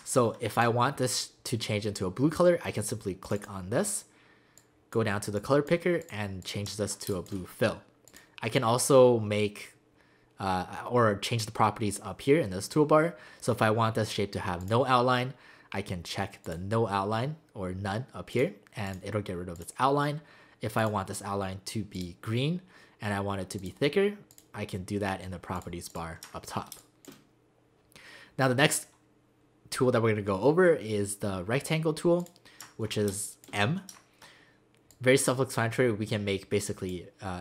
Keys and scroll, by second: 7.1 space, 26.8 space, 33.1 space.